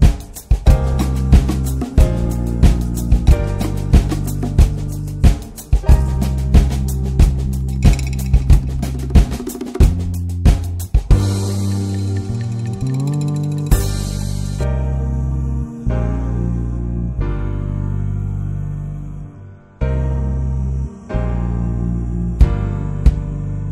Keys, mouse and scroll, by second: 0.1-0.5 scroll up 2, 0.5 click, 1.4 click, 2.1 middle click, 2.3 alt+z, 2.6 shift+middle click, 2.7 scroll up 1, 2.8 alt+z, 2.9 middle click, 3.4 ctrl+r, 4.4 ctrl+z, 5.8 click, 6.0 scroll down 2, 6.2 middle click, 6.3 scroll up 2, 6.5 shift+middle click, 7.1 2, 7.3 click, 7.8 alt+z, 8.1 right click, 9.0 middle click, 9.9 click, 11.0 ctrl+r, 12.1 shift+r, 12.5 middle click, 13.3 click, 14.0 shift+r, 14.5 alt+middle click, 15.2 1, 15.3 click, 15.9-17.8 drag, 18.8 alt+middle click, 19.8-21.7 drag, 21.7 scroll down 2, 21.9 alt+middle click, 23.1 click.